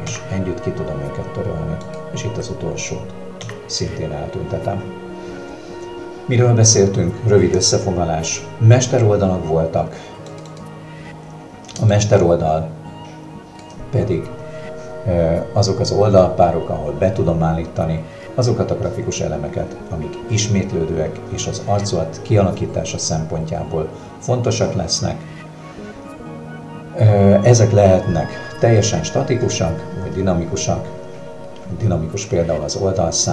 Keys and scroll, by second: 0.1 Delete, 3.4 Delete, 13.6 space.